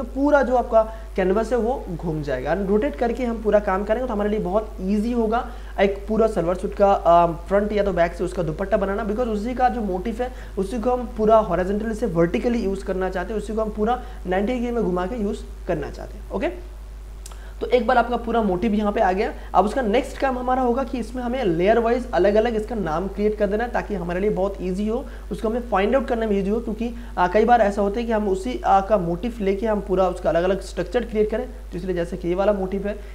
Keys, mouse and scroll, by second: 19.3 ctrl+space, 19.7 ctrl+click, 19.9 ctrl+space, 31.8 click, 31.9 click.